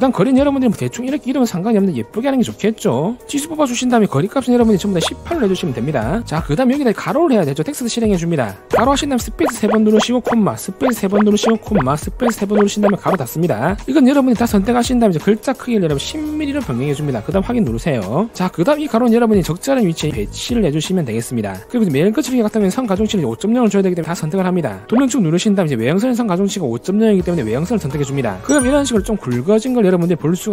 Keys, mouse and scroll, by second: 1.4 click, 2.8 click, 3.5 click, 4.4 click, 4.9 click, 5.3 1, 8.3 t, 8.6 click, 15.5 a, 15.8 click, 16.2 1, 17.9 click, 18.7-20.6 drag, 20.9 click, 24.3 click.